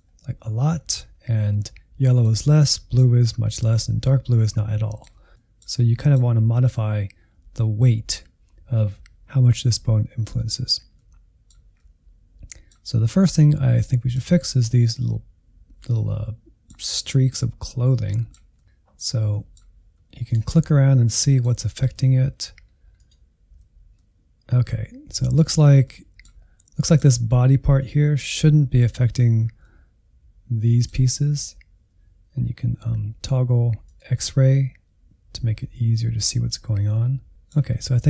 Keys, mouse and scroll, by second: 1.1-1.5 scroll up 1, 1.5-6.3 middle drag, 6.3-9.0 scroll up 1, 10.0-12.4 middle drag, 12.4 scroll up 1, 12.6-13.7 middle drag, 13.7-14.7 scroll up 1, 14.7-15.1 scroll up 1, 15.1-18.0 middle drag, 18.0 scroll down 1, 18.2-20.5 middle drag, 20.5 ctrl+click, 21.1-23.2 middle drag, 23.2 ctrl+click, 23.9-26.4 middle drag, 26.4 scroll up 1, 26.7-32.6 middle drag, 33.8 click, 34.4-36.3 middle drag, 37.0-38.0 middle drag.